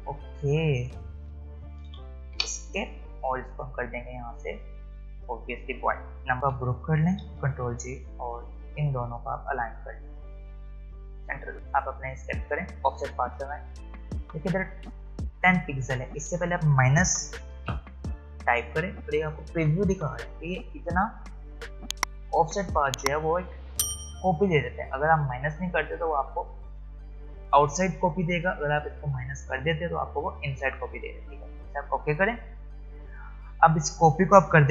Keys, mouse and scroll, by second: 5.7 click, 7.3 ctrl+g, 8.4 shift+click, 11.5 click, 19.0 click, 32.3 click.